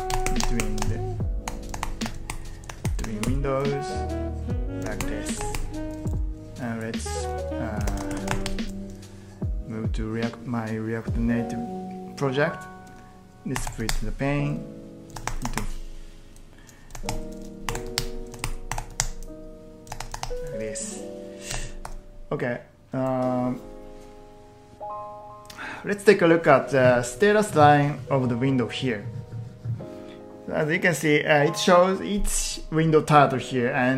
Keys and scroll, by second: 0.2 ctrl+t, 0.9 ctrl+t, 1.5 p, 1.8 ctrl+t, 2.1 ctrl+t, 2.7 ctrl+t, 3.1 ctrl+t, 4.9 ctrl+t, 5.4 ctrl+t, 7.6-9.0 typing, 13.3-15.6 typing, 15.2 ctrl+t, 15.5 ctrl+t, 17.0 ctrl+t, 17.4-19.3 typing, 18.4 ctrl+t, 19.9 ctrl+t, 20.2 ctrl+t, 21.5 ctrl+t, 22.3-23.0 typing.